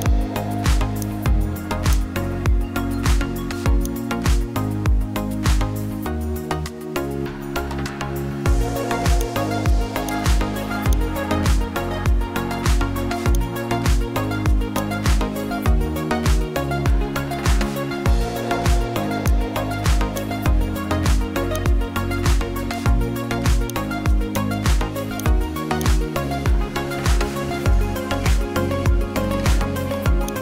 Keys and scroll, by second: 7.4 ctrl+z.